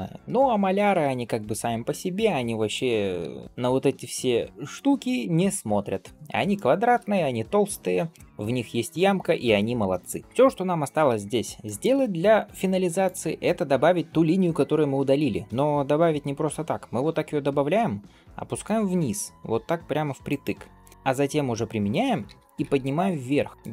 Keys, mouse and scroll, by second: 0.2 scroll up 1, 0.2 g, 2.2 scroll up 1, 2.2 middle click, 3.3 ctrl+s, 3.4-4.0 scroll down 1, 4.0 scroll up 1, 4.4 middle click, 6.4 shift+middle click, 9.4 shift+middle click, 9.9 middle click, 11.5 shift+middle click, 12.6 scroll up 1, 12.9 click, 13.3 Tab, 15.0 ctrl+r.